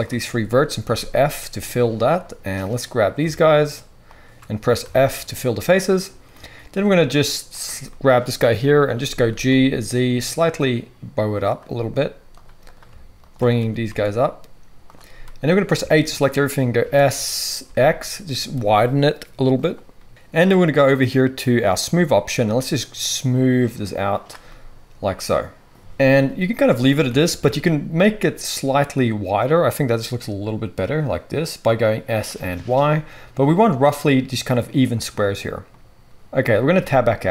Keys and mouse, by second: 0.0-2.8 shift+drag, 0.8 f, 2.8 middle click, 3.2 shift+click, 3.5 shift+middle click, 3.6 shift+right click, 4.0 shift+middle click, 4.2-7.6 shift+right drag, 4.8 f, 7.6 middle click, 7.9-12.6 right drag, 8.9 g, 12.6 middle click, 12.7 shift+click, 13.2 shift+middle click, 13.3-21.3 shift+drag, 13.5 g, 15.7 a, 16.8 s, 21.6-31.6 drag, 21.7-32.3 middle drag, 21.7-31.6 right drag, 25.7 KP_3, 27.0 s, 32.3-37.3 right drag, 36.0 KP_1, 36.8 Tab.